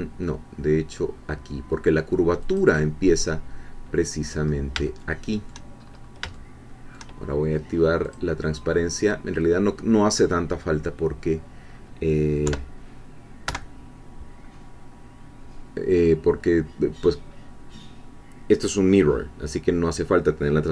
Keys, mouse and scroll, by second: 2.4 click, 4.1-4.6 scroll up 1, 4.9 shift+middle click, 5.8-6.3 shift+scroll up 1, 6.3 shift+middle click, 8.0 click, 10.3-10.7 scroll up 2, 11.0-12.0 scroll down 2, 12.5 3, 13.5 1, 14.5-15.1 scroll up 2, 16.4-20.7 middle drag, 16.4-18.2 scroll down 2, 18.2-20.0 scroll down 1, 20.0-20.7 scroll down 1.